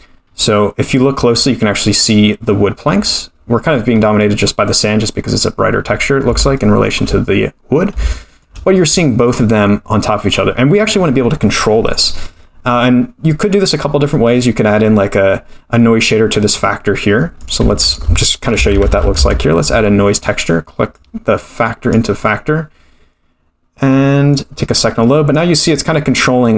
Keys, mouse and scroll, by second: 0.3-0.9 scroll up 4, 0.9-1.9 scroll up 3, 3.3-4.2 scroll down 4, 4.2-4.7 middle drag, 6.5-6.9 shift+middle drag, 8.1-8.4 shift+middle drag, 8.8-9.3 middle drag, 9.5-11.2 scroll up 2, 11.9-13.0 scroll down 6, 14.4-15.4 middle drag, 16.5-17.4 scroll up 1, 17.4 click, 17.4 scroll up 3, 17.6 shift+a, 20.9-22.0 drag, 24.0 middle click, 24.0 scroll up 1, 25.0-26.5 middle drag.